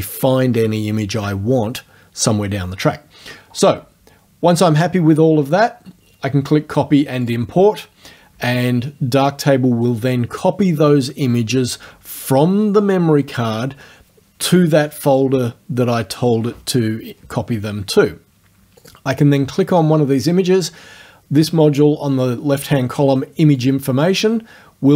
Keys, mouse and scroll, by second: 7.3 click, 18.8 click, 23.6 click.